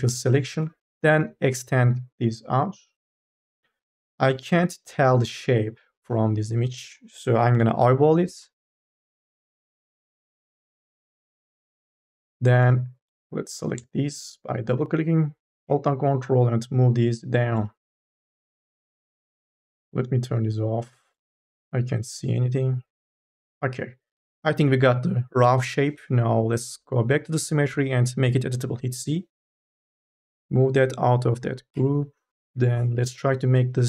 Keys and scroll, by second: 0.2 f, 0.3 e, 0.9 ctrl+z, 9.4 ctrl+z, 13.1 2, 28.9 c, 31.6 Delete.